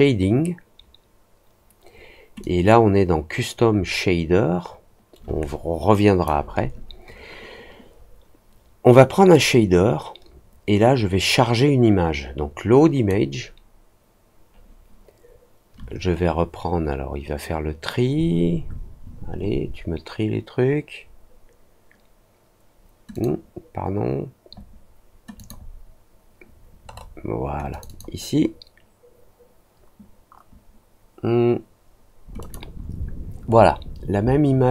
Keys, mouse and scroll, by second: 2.3-6.2 drag, 9.2-13.0 drag, 23.1 click, 25.3 click, 26.8 middle click, 27.6 click, 27.8 click, 32.3 click.